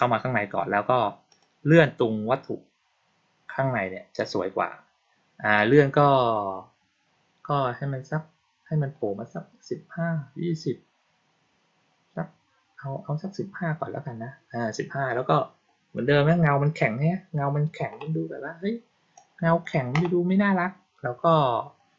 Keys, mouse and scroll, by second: 1.2 click, 5.5 click, 6.9-14.9 middle drag, 19.1-19.5 drag.